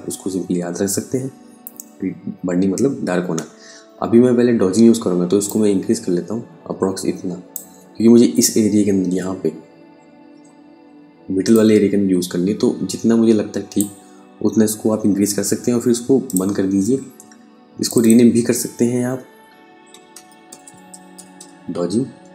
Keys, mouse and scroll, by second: 4.9 click, 11.0 click, 15.7 click, 19.3-21.1 typing.